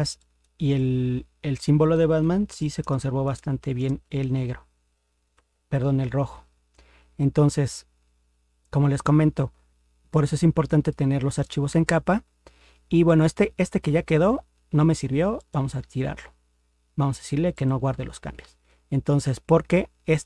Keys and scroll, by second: 2.5 ctrl++, 5.3 ctrl+0.